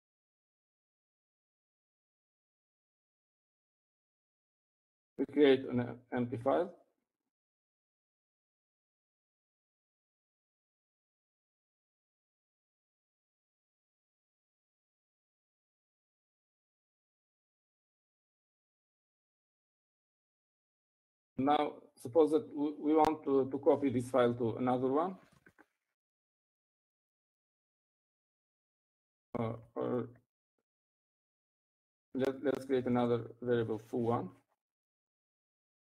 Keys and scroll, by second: 4.1 typing, 10.2-14.3 typing, 16.2-18.3 typing, 21.6-22.3 typing, 26.6-31.1 typing, 34.0-34.5 BackSpace.